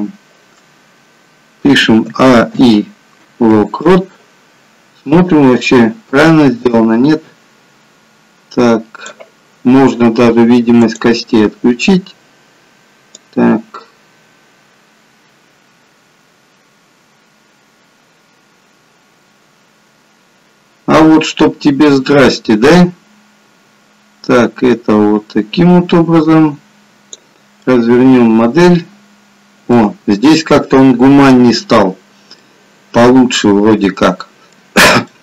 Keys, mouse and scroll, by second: 2.2 a, 2.6 i, 5.4 click, 10.8 click, 13.3 click, 27.6 middle click, 32.3 middle click.